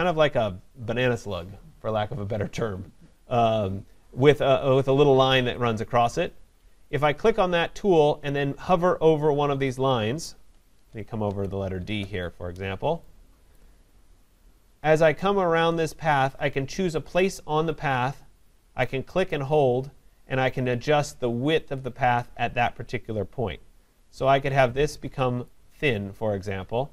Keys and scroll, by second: 10.8 ctrl+=.